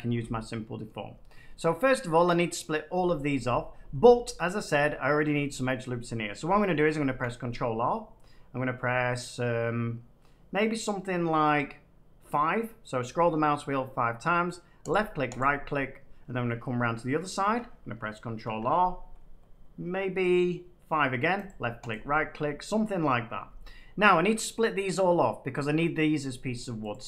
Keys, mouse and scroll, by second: 0.8 middle click, 6.3-7.8 middle drag, 7.0 ctrl+r, 8.7 middle click, 8.8 middle click, 9.0 middle click, 11.3 middle click, 14.9 click, 15.3 right click, 16.9 middle click, 18.4 ctrl+r, 19.3-20.4 middle drag, 21.4 click, 21.8 right click, 23.0 middle click, 26.8-27.0 drag.